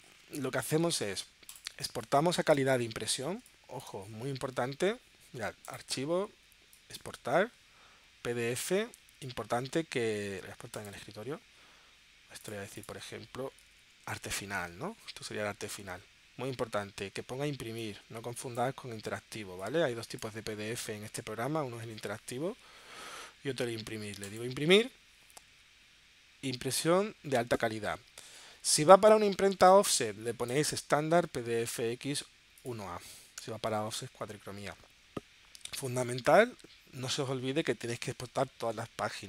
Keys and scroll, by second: 0.8 super+s, 1.9 space, 3.4 space, 14.1 shift+a, 14.4 shift+f.